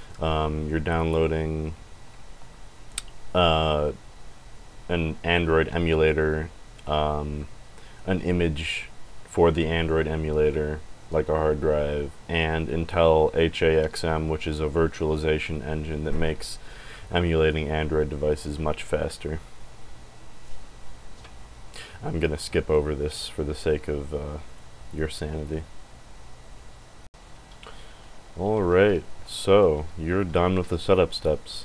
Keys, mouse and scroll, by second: 24.4 click.